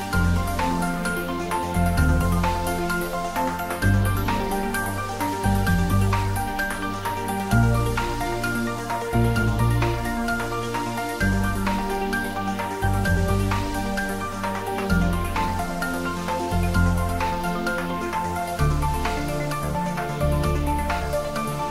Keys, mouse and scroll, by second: 0.2 click, 0.5-2.5 typing, 1.0 click, 2.0 click, 4.3 click, 4.5 ctrl+middle click, 5.1 ctrl+s, 5.8 s, 6.3 click, 6.7 ctrl+middle click, 7.7 ctrl+middle click, 8.3 shift+middle click, 8.4-9.9 typing, 11.7 click, 11.9 ctrl+s, 12.2 ctrl+middle click, 12.7-13.6 typing, 16.1 click, 16.7-17.6 typing, 19.8 click, 21.1 middle click.